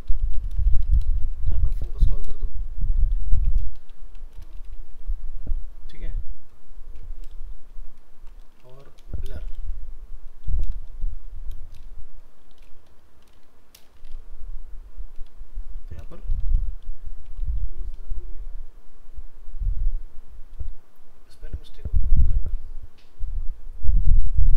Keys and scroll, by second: 7.3 shift+Left, 8.0 shift+Right, 8.7 ctrl+c, 9.5 ctrl+v.